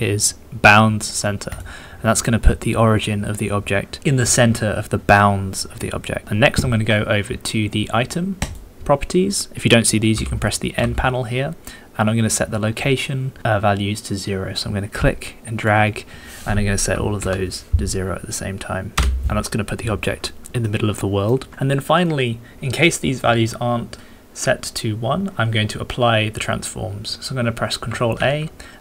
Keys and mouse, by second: 10.1 n, 10.7 n, 14.9-19.1 drag, 20.7 shift+click, 28.1 ctrl+a.